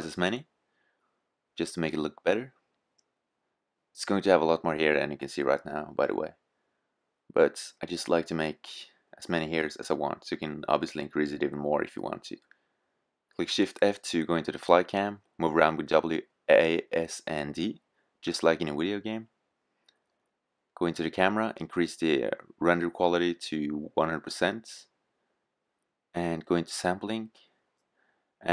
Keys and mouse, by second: 1.9 KP_0, 10.3-11.9 drag, 11.4 shift+f, 19.8-21.5 drag, 21.7-23.4 drag, 23.5-28.5 drag.